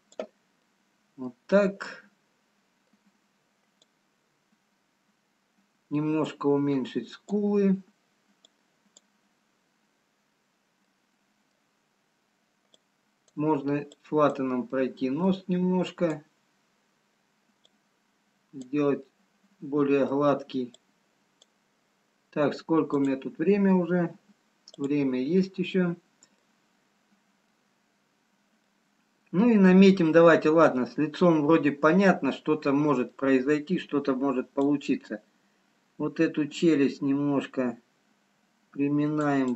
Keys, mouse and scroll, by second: 1.5 middle click, 3.0 middle click, 4.6 click, 10.0 click, 11.4 middle click, 13.7 click, 14.6 click, 15.4 middle click, 16.6 click, 18.1 click, 18.1-18.9 scroll down 1, 21.8 middle click, 26.5 middle click, 28.5 middle click, 30.6-31.1 scroll down 4, 31.8 middle click, 33.2 middle click, 34.7 click, 34.7-35.7 scroll up 2.